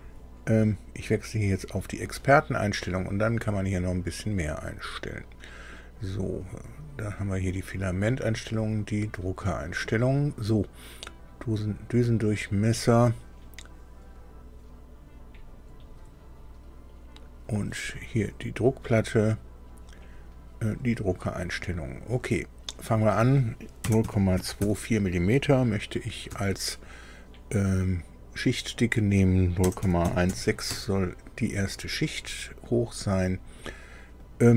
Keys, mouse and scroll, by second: 1.5 click, 6.4 click, 8.5 click, 17.7 click, 20.0 click, 22.6 click, 23.8 KP_0, 24.0 KP_Decimal, 24.4 KP_2, 24.6 KP_4, 29.6 KP_0, 29.8 KP_Decimal, 30.0 KP_1, 30.2 KP_6.